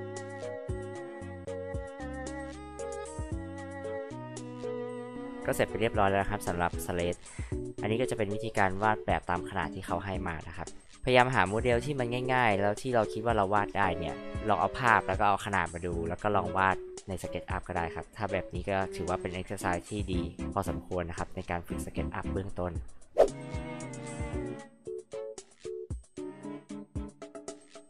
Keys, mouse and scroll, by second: 0.5 click, 1.4 h, 1.5 click, 1.7 click, 2.1 m, 2.1 click, 2.5 click, 2.7 click, 2.9 click, 3.1 space, 3.2 click, 3.2 h, 3.4 click, 4.4 click, 5.2-5.6 drag, 10.8 drag, 27.5-27.8 drag.